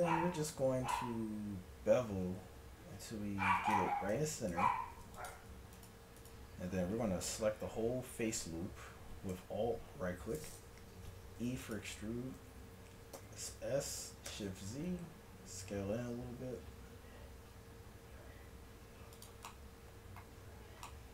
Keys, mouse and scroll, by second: 4.2 a, 4.5 ctrl+Tab, 5.8-8.0 drag, 11.4 e, 13.2 s, 19.5-21.1 middle drag.